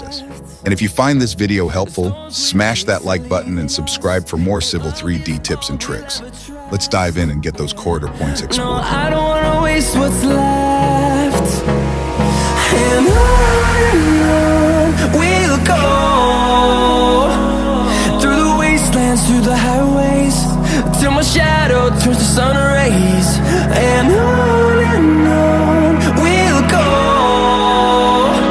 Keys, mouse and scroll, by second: 0.6-1.8 scroll up 4, 2.7 click, 3.3 click, 4.2 middle click, 4.6 middle drag, 5.0 scroll up 2, 5.4 middle click, 6.2 click, 7.0 middle click, 8.2 click, 9.8 click, 12.9 click, 15.7 right click, 19.7 right click, 21.1 click, 23.8 click, 24.6 click, 25.1-25.8 scroll down 4, 26.0-26.4 scroll up 2.